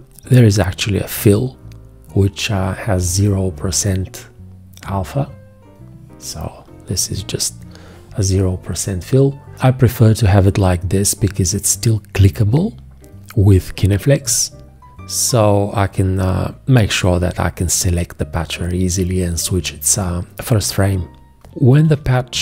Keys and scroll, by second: 21.9 `.